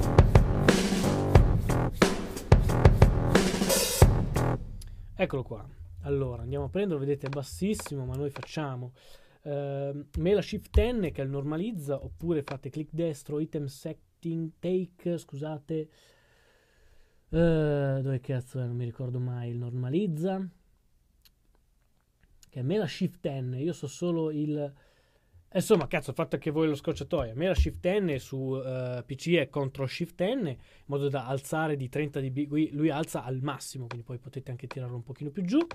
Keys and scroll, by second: 5.9-8.3 typing, 10.7 shift+super+n, 12.1 super+z, 27.5 shift+super+n.